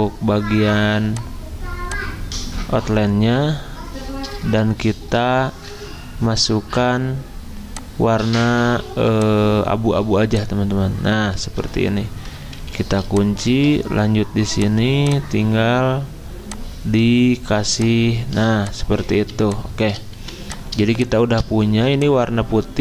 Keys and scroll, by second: 5.2 F6, 5.7 F6, 12.6 ctrl+2, 13.5 ctrl+z, 18.3 z, 20.2 v, 21.7 z.